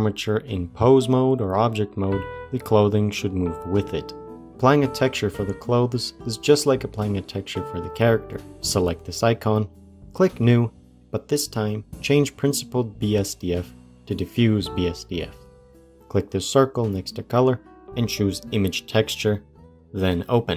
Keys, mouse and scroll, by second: 1.1 g, 6.2 click, 9.8 click, 11.1-14.8 drag, 17.0-19.9 drag.